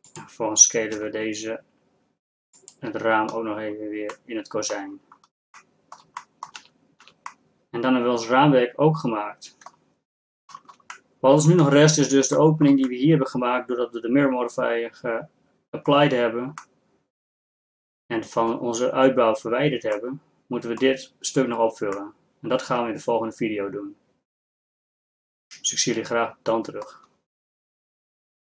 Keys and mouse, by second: 1.0 s, 6.6 z, 7.2 z, 13.2-14.9 middle drag, 15.3-20.2 middle drag, 20.3-22.8 middle drag, 23.1 middle click, 23.8 middle click.